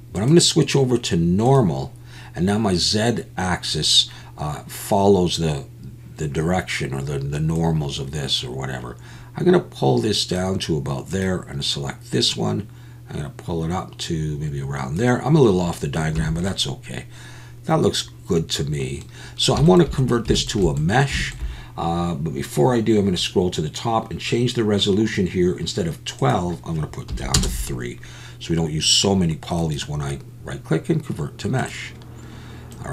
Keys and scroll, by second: 16.2 Tab.